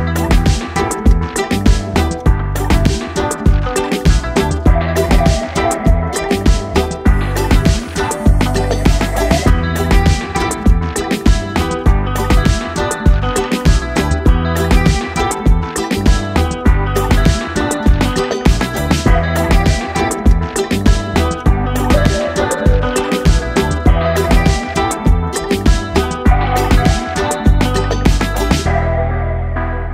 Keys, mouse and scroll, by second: 0.8 Down, 3.1 scroll up 1, 5.2 scroll up 1, 6.1 ctrl+click, 11.1 click, 12.3 ctrl+space, 12.4-13.1 ctrl+click, 12.6 ctrl+space, 13.1 click, 14.6 space, 14.8-15.3 click, 15.1 space, 15.6-17.9 drag, 20.5 ctrl+d, 22.2 click, 22.6 ctrl+space, 22.7-23.1 ctrl+click, 23.1 ctrl+space, 24.8 click.